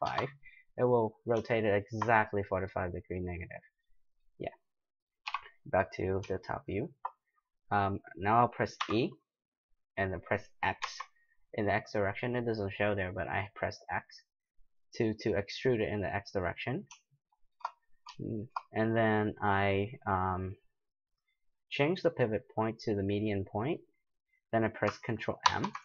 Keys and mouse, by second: 3.1-6.6 middle drag, 5.2 KP_7, 8.8 e, 17.3-20.1 middle drag, 21.9-24.0 drag, 24.4-25.8 middle drag, 25.4 ctrl+m.